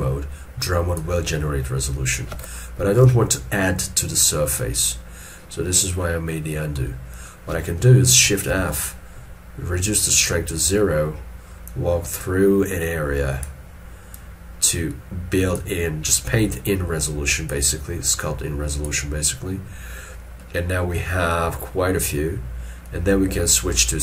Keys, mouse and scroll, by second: 3.1 ctrl+z, 6.3 middle click, 8.5 shift+f, 20.4 middle click, 22.2 scroll up 1.